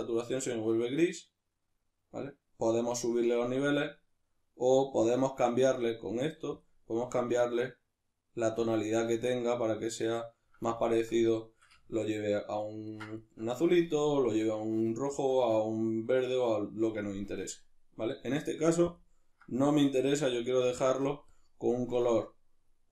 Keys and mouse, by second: 10.8-18.9 ctrl+middle drag, 18.9 drag, 18.9-22.2 middle drag, 21.3 click.